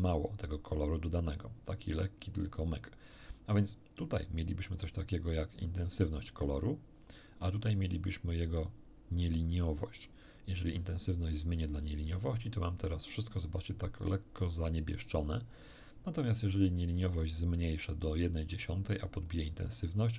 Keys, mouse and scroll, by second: 4.0-6.1 drag, 8.0-10.2 drag, 11.3-13.3 drag, 16.7-18.0 drag, 18.3 click, 19.2 click.